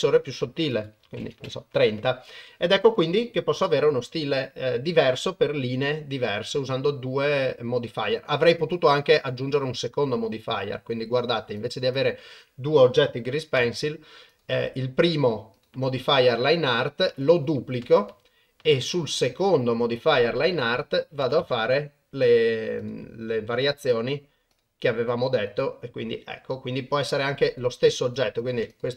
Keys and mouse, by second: 0.9 click, 8.6 click, 11.6 click, 11.9 click, 13.6 Delete, 15.5 click, 17.1-18.1 drag, 20.5 click, 22.8 click, 23.6 click, 24.0 click, 24.5 click, 25.1 click, 25.5 click, 27.4 click, 28.1 click, 28.7-28.9 drag.